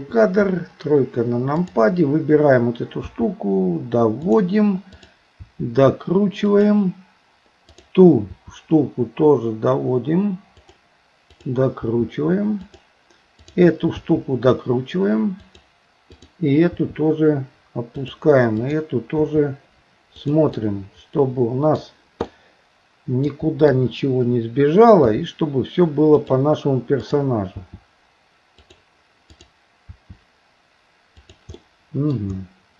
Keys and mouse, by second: 0.0 KP_2, 0.4 KP_3, 3.1 r, 4.9 click, 5.4 r, 7.7 click, 11.8 r, 13.5 click, 14.0 r, 16.1 click, 18.6 click, 19.1 r, 20.6-21.8 middle drag, 22.3-23.3 middle drag, 23.7 KP_3, 25.1 r, 27.1 click, 27.5 r, 29.3 click, 31.6 middle click.